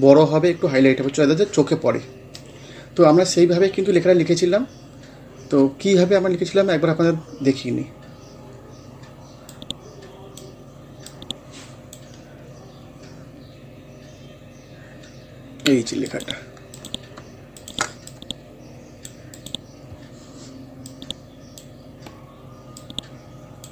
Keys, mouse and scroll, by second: 7.5 scroll down 1, 9.5-12.2 drag, 12.2 scroll up 1, 13.3 scroll down 1, 15.1 scroll up 1, 16.1 click, 19.8 scroll up 1, 20.9-23.7 drag.